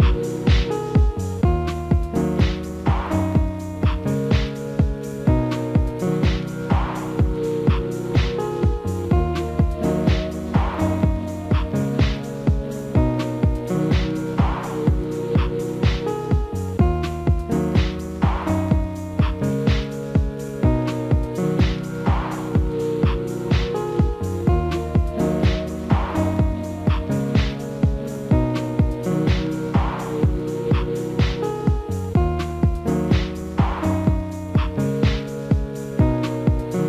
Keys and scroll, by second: 4.8 alt+w, 12.6 alt+w, 24.8 alt+w, 31.5 ctrl+z.